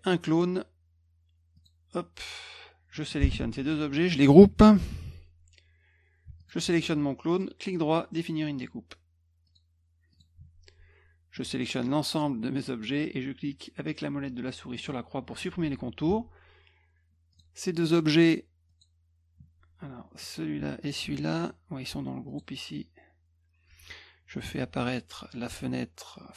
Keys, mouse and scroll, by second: 1.6 click, 3.0 click, 3.6 shift+click, 4.9 ctrl+g, 6.4 shift+click, 7.3 right click, 9.4 click, 10.1 click, 11.4 click, 14.8 middle click, 16.1 F2, 17.3 click, 18.7 click, 20.2 click, 20.8 shift+click, 22.3 click, 23.7 F1.